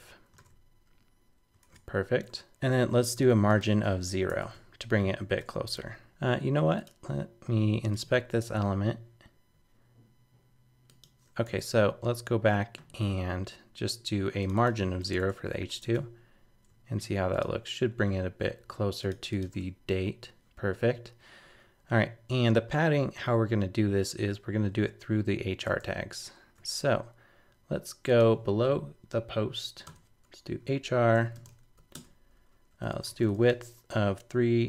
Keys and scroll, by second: 0.3 super+r, 1.6 super+Tab, 4.1 super+s, 4.3 super+Tab, 5.4 super+r, 6.1 super+Tab, 15.5 super+s, 15.8 super+Tab, 19.5 super+r, 25.7 super+Tab.